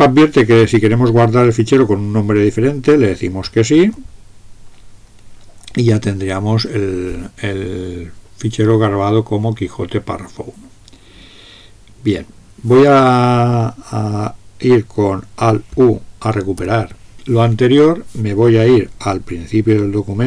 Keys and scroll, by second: 3.8 s, 16.6 alt+u.